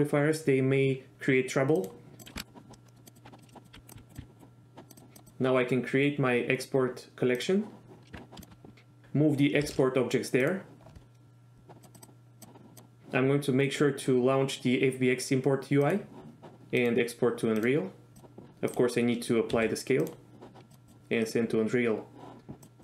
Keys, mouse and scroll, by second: 1.9 click, 2.2 click, 2.9 middle click, 3.3 Tab, 3.4 click, 3.6 click, 3.7-4.2 r, 3.9 right click, 3.9 click, 4.9 click, 5.2-7.6 drag, 8.2 Tab, 8.4 shift+drag, 9.0 m, 9.8 m, 11.8-16.4 drag, 17.0-18.3 drag, 19.7 ctrl+a, 20.8-22.8 drag.